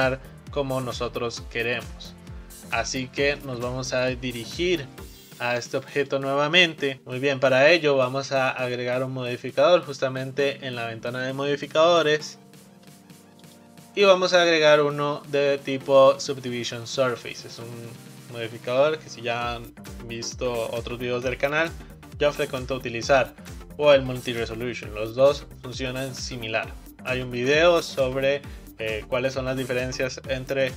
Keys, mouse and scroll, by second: 3.3 click, 5.0-6.0 shift+middle drag, 6.0 click, 13.5 click.